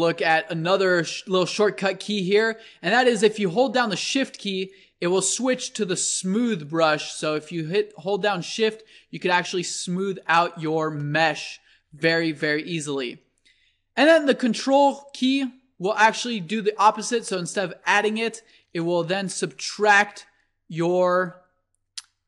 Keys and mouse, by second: 0.3 middle click, 0.5-1.2 drag, 1.2 middle click, 4.1-5.9 drag, 6.4-11.0 drag, 11.0 middle click, 11.5 middle click, 12.1-14.3 middle drag, 14.3-16.1 drag, 17.1-19.9 middle drag, 19.9-22.2 drag.